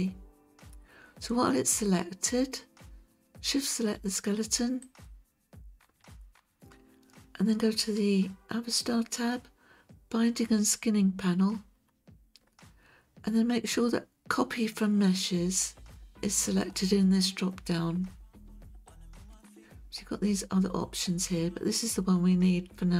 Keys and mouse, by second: 4.9 shift+click, 18.9 click.